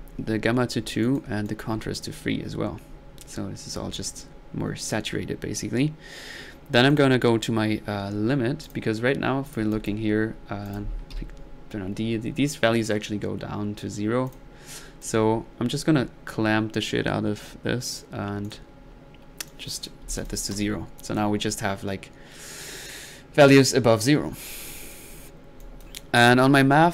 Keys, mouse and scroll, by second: 1.0 drag, 1.5 click, 5.5 middle drag, 5.5 typing, 8.6 click, 9.5 click, 9.7 click, 10.7 click, 11.2 d, 14.3 click, 14.6 middle click, 15.0 click, 17.9 click, 18.5 drag, 19.5-19.9 drag, 21.0 click, 21.4 middle click, 24.4 middle click, 24.8 click.